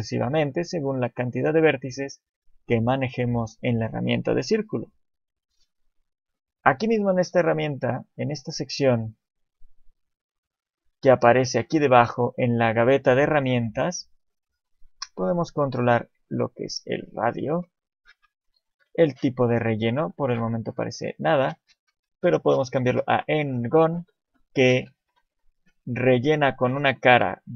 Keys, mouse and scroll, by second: 0.0 click, 0.0 shift+middle click, 9.7 click, 14.9 click, 20.6 click.